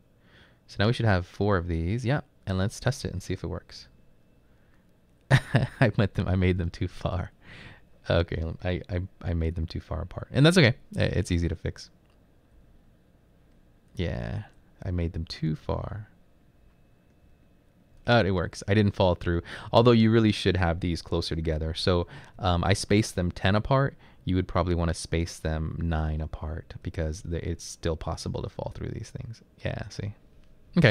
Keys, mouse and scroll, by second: 3.8 Up, 4.3 Up, 4.8 Up, 12.6 Right, 13.1 Right, 14.8 Up, 15.1 Left, 18.3 Right, 18.8 Right, 19.6 Left, 19.9-22.4 typing, 20.3 Left, 23.5-26.9 typing, 26.2 Right, 28.1 Right, 28.4 Up, 29.0 Up, 29.7-30.4 typing.